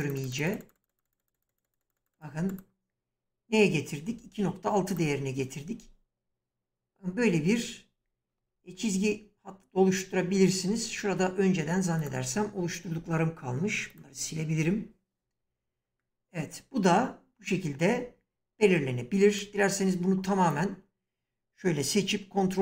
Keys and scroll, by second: 13.0 Delete.